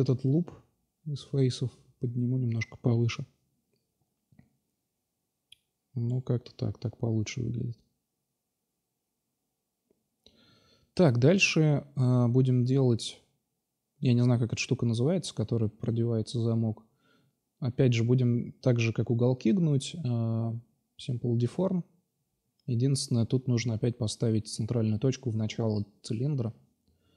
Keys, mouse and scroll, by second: 1.0 middle drag, 3.1 click, 3.5 Tab, 8.9 shift+c, 9.1 shift+a, 11.9-12.7 drag, 13.2 middle drag, 13.4-14.4 drag, 14.4 Tab, 16.2 s, 17.5 Tab, 18.2-18.9 drag, 19.2-20.5 drag, 21.4 click, 21.6 drag, 21.8 click, 22.1 Tab, 22.9 r, 23.7-25.5 drag, 25.5 ctrl+z, 26.1 r.